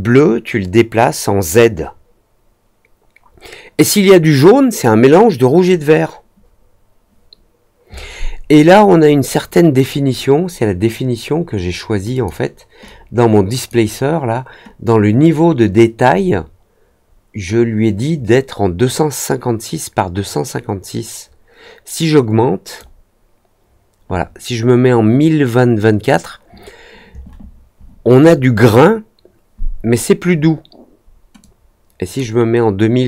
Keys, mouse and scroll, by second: 12.1 click, 12.8 click, 15.1-22.7 drag, 31.3-32.1 drag.